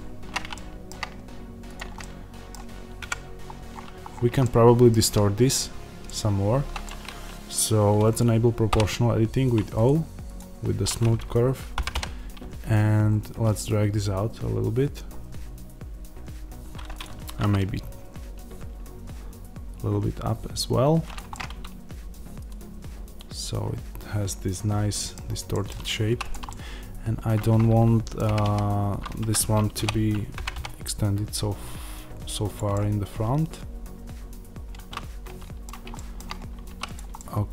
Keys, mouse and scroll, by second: 0.4-1.6 shift+middle drag, 1.6 click, 1.9-16.9 middle drag, 2.9 KP_Decimal, 3.4-3.9 scroll down 1, 8.6 o, 16.9 click, 17.1 g, 21.0 click, 21.2-26.1 middle drag, 25.9 2, 26.1 click, 26.3-32.4 middle drag, 28.2 g, 29.2 Escape, 29.7 o, 32.4 click, 32.6-36.7 middle drag, 36.6 3, 36.7 click, 37.1-37.5 middle drag.